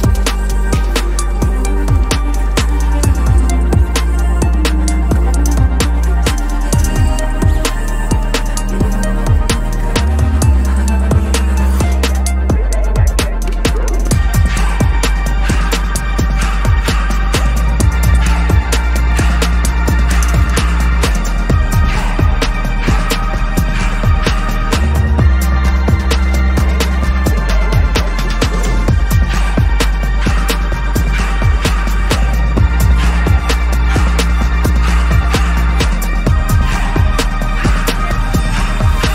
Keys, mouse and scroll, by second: 1.5 double click, 2.0 BackSpace, 2.7 ctrl+s, 9.0 alt+shift+click, 9.5 double click, 10.1-10.6 typing, 11.1 Return, 12.7 right click, 14.2 ctrl+z, 14.4 ctrl+right click, 16.3 double click, 16.8 BackSpace, 17.4 ctrl+s, 19.0-20.8 scroll up 1, 22.2 double click, 23.2 BackSpace, 23.8 ctrl+s, 27.0 ctrl+-, 27.2 ctrl+-, 27.8 ctrl+´, 27.9 ctrl+´, 28.0 ctrl+´, 28.8 ctrl+-, 30.2 shift+click, 30.8 ctrl+ت, 31.9 alt+shift+click, 34.5 Return, 36.1 scroll up 1, 36.3-37.7 scroll down 1.